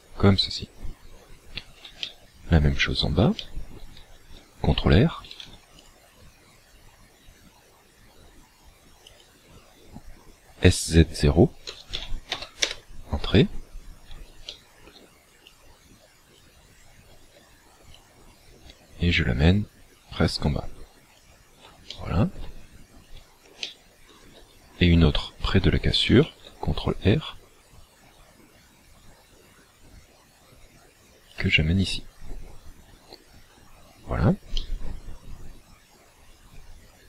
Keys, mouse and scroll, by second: 2.1 shift+middle click, 3.4 shift+middle click, 5.3 ctrl+r, 9.3 click, 11.7 s, 14.6 shift+middle click, 15.5 click, 16.7-17.1 scroll up 3, 18.0 click, 21.9 shift+middle click, 22.6-23.1 scroll down 2, 23.1 scroll down 1, 23.6 shift+middle click, 26.1 ctrl+r, 31.5 click, 34.6 middle click.